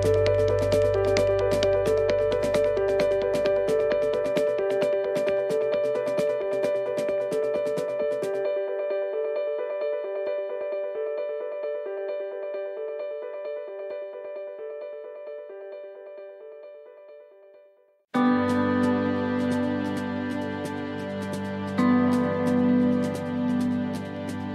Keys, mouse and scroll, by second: 0.3 click, 2.6 right click, 3.3 click, 8.2 alt+shift+right click, 9.3 right click, 10.3 alt+shift+right click, 12.4 alt+shift+right click, 15.1 c, 18.6 shift+right click, 19.3 middle click, 19.7-20.2 scroll down 2, 20.3 shift+middle click, 21.3-21.6 scroll up 1, 22.8 alt+shift+right click, 23.4 alt+shift+right click.